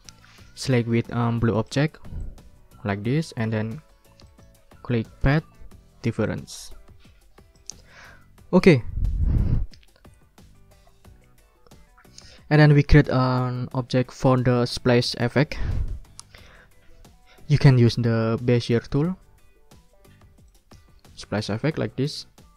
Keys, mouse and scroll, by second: 1.6 shift+click, 2.2 shift+click, 3.2 ctrl+z, 4.3 click, 6.2 click, 7.5 click, 7.9 click, 20.5 click.